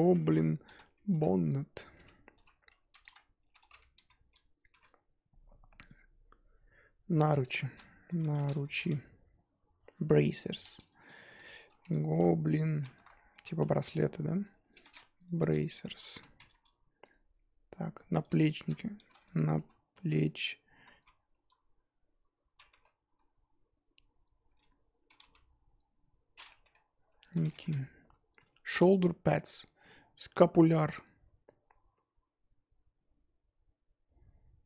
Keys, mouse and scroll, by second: 4.7 n, 5.9 click, 11.0-16.5 drag, 17.1 click.